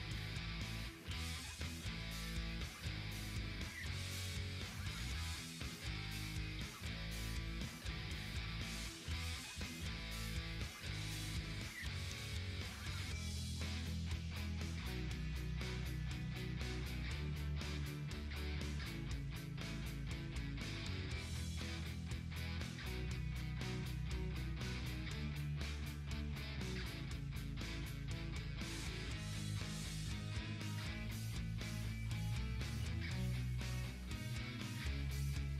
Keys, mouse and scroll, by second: 0.0-0.1 typing, 6.6 click, 6.7-7.5 typing, 9.5-15.9 ctrl+drag, 12.5-13.2 typing, 17.8-18.5 typing, 17.9-20.3 drag, 20.3 ctrl+z, 22.5-24.3 drag, 25.6-32.0 ctrl+drag, 33.1-33.8 typing, 33.3 click, 33.9 ctrl+z, 34.5-35.5 drag.